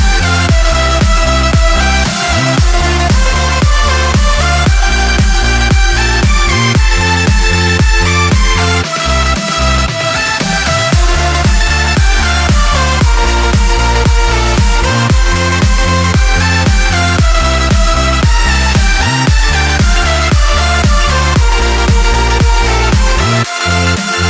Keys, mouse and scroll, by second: 0.1-1.3 drag, 1.4 scroll up 2, 5.0 click, 7.7 ctrl+shift+click, 8.7 space, 14.6 shift+click, 16.4 shift+click, 18.9 shift+click, 20.7 ctrl+shift+j, 22.9 click, 23.9 click.